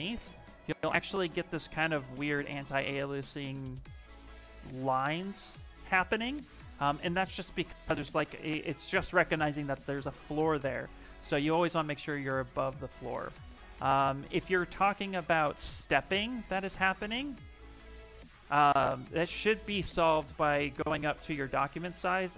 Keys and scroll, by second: 15.5 s.